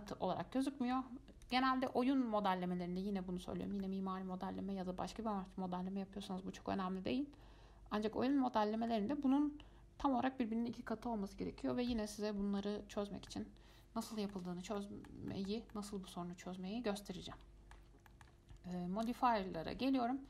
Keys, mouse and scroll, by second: 1.6 click, 2.0 click, 4.0-7.0 middle drag, 12.1-19.2 middle drag, 19.2-20.2 drag.